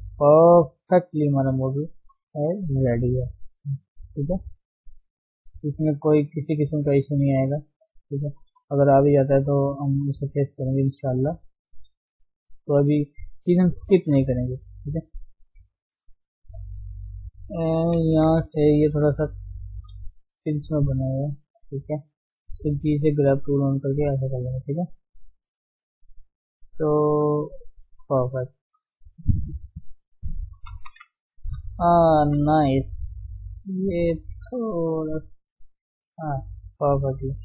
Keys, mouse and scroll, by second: 0.1 scroll down 3, 0.3 middle click, 1.1 scroll up 2, 1.3 shift+middle click, 2.2 click, 2.9 middle click, 3.1 scroll up 1, 3.2 click, 4.0 middle click, 4.3 click, 5.0 middle click, 5.4 click, 5.9 middle click, 6.4 click, 7.0 middle click, 7.2 scroll up 1, 7.4 click, 8.2 middle click, 8.9 click, 9.3 middle click, 10.0 click, 10.6 scroll down 1, 10.6 middle click, 11.0 scroll up 1, 11.3 click, 11.9 scroll down 3, 12.0 shift+middle click, 12.8-13.1 scroll up 1, 13.1 click, 13.6-14.6 shift+middle drag, 14.6-14.9 scroll up 1, 14.9 shift+middle click, 15.1-16.0 scroll down 1, 16.0 ctrl+KP_1, 16.3-17.8 scroll up 1, 17.8 g, 18.1 f, 18.7 shift+middle click, 19.0-20.4 scroll up 1, 20.4 click, 21.0 d, 21.1 d, 21.6 right click, 22.1-22.8 scroll up 1, 22.8-28.2 drag, 28.2 scroll down 2, 28.3-30.5 middle drag, 30.5 KP_3, 30.8-31.3 scroll up 1, 31.3-32.5 scroll down 7, 31.8 shift+middle click, 32.5 shift+middle click, 32.7-33.0 scroll up 1, 33.0 shift+middle click, 33.2-33.8 scroll up 1, 33.8-35.2 drag, 35.2 shift+middle click, 35.4-35.8 scroll up 2, 35.8 click, 36.2 scroll down 4, 36.5 shift+middle click, 36.7-37.4 scroll up 3, 37.0 shift+middle click, 37.3 shift+middle click.